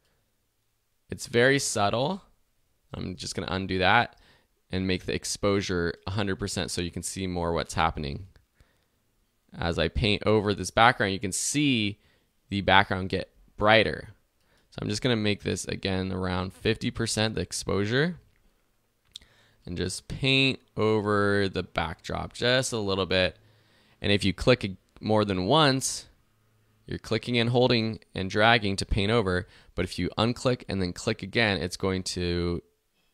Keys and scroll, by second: 2.9 super+z, 13.2 super+z.